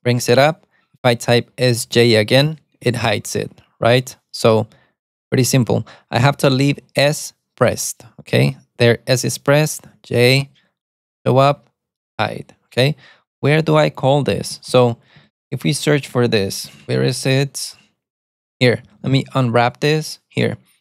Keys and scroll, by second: 2.2 alt+super+a, 3.0 alt+super+a, 4.7 alt+super+a, 5.0 alt+super+a, 5.3 alt+super+a, 10.1 alt+super+a, 11.1 d, 11.7 alt+super+a, 11.7 d, 13.6-17.3 typing, 17.8 Return, 18.8-19.7 typing.